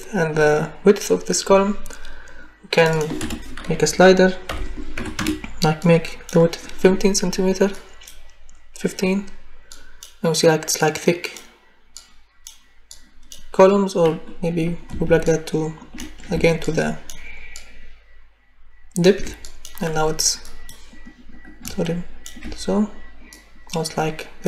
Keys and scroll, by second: 3.2 0, 4.9 5, 5.2 Return.